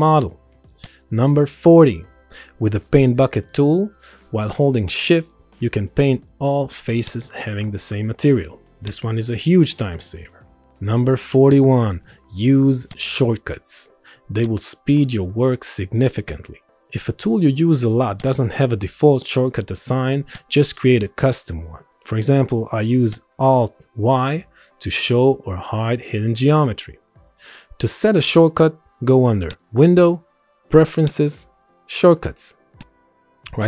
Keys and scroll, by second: 11.5 c, 12.2 c, 13.9 p, 17.6 space, 18.1 space, 19.1 s, 24.4 alt+y, 25.5 alt+y, 26.2 alt+y, 26.9 alt+y, 27.5 alt+y.